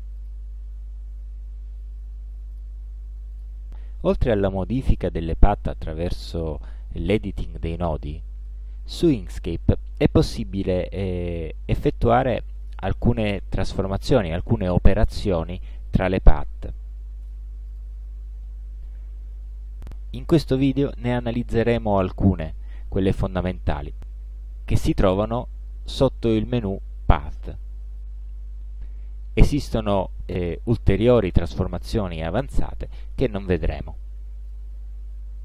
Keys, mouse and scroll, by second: 0.2 click, 2.6 click, 3.4 click, 7.8 click, 9.0 ctrl+z, 17.3 space, 17.8 click, 25.7 click, 34.6 click.